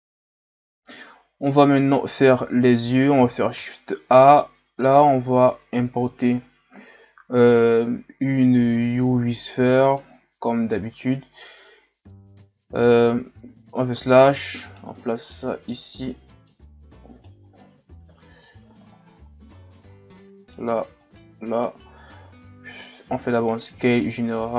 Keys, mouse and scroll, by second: 0.5 scroll down 1, 1.0-1.7 shift+scroll up 4, 1.7 scroll down 2, 3.5 shift+a, 10.8-11.3 scroll up 1, 11.3-13.3 scroll up 1, 13.3 Tab, 14.3 click, 15.0 scroll down 2, 15.3-16.5 middle drag, 16.5-18.1 drag, 18.1 KP_1, 18.8-20.2 shift+scroll up 7, 20.2-22.1 drag, 22.1 s, 23.8-24.5 ctrl+scroll up 4.